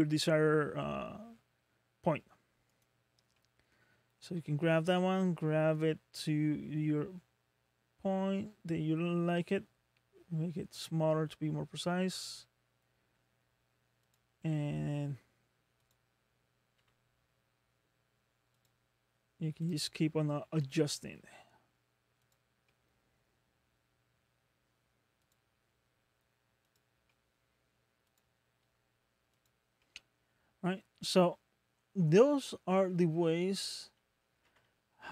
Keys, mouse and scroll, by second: 3.2 scroll down 1, 3.4 middle click, 4.9 g, 14.4 middle click, 15.8 click, 16.8 g, 19.7 click, 20.6 g, 22.7 middle click, 25.2 click, 25.9 g, 27.1 middle click, 28.1 click, 28.6 g, 29.8 middle click, 30.5-31.0 scroll down 4, 31.2 middle click, 34.4 Tab, 34.5 Tab, 35.0 scroll down 1.